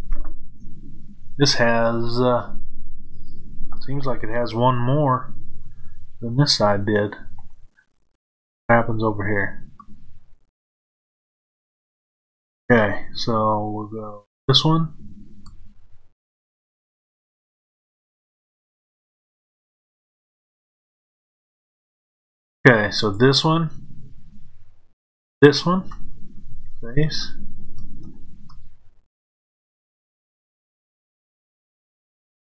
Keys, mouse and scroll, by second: 7.5-14.1 middle drag, 14.1 click, 22.2 middle click, 22.8 shift+click, 25.1 shift+click, 26.4 f, 27.9 shift+click, 28.8 click, 29.7 shift+click, 31.3 shift+click, 32.4 shift+click.